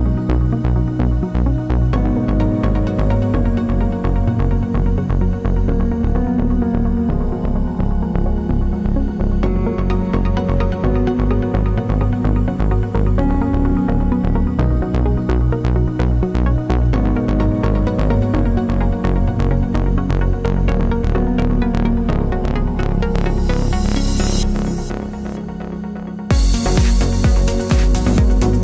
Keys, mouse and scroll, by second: 0.6 click, 0.9 KP_7, 1.8 click, 2.3 s, 2.5 KP_Enter, 2.8 ctrl+z, 3.8 click, 4.1 g, 4.9 click, 4.9 g, 5.8 g, 6.1-7.1 drag, 6.2 g, 7.7 g, 9.0-10.1 drag, 9.1 g, 11.1 middle click, 11.4 ctrl+r, 11.7 Escape, 12.7 2, 12.9 click, 15.9 z, 16.0 1, 19.2 2, 19.5 click, 20.9 click, 22.3 1, 23.0 middle click, 23.2 ctrl+z, 23.4 middle click, 23.8 ctrl+z, 25.9 middle click.